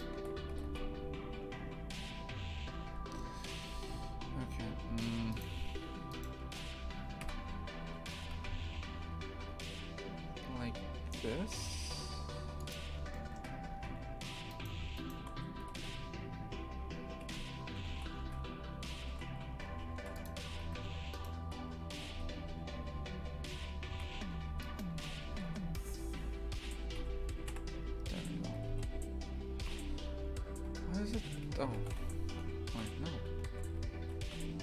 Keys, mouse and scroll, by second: 0.5 g, 5.3 right click, 6.1-7.2 shift+right drag, 7.2 KP_3, 8.1 g, 13.1 shift+middle click, 13.7 a, 14.5-15.6 alt+shift+right drag, 15.6 g, 17.9 shift+f, 20.4 a, 20.6 a, 21.1 alt+shift+right click, 22.0 g, 24.6 shift+right click, 25.3 g, 27.5 KP_3, 28.6 g, 30.6 g, 31.7 shift+f.